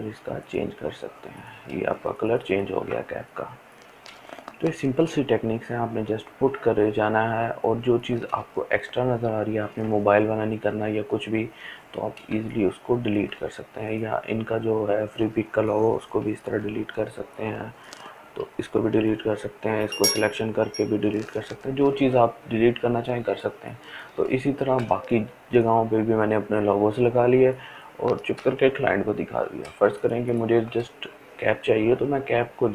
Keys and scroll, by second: 15.8 Delete, 21.8 ctrl+z, 22.9-27.6 ctrl+z, 29.4 ctrl+space, 29.9 ctrl+space.